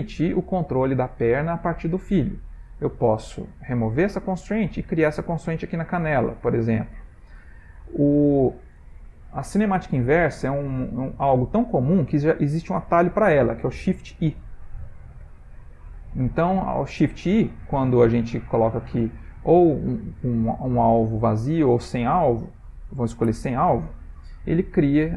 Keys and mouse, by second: 4.1 click, 5.0 click, 14.7 shift+i.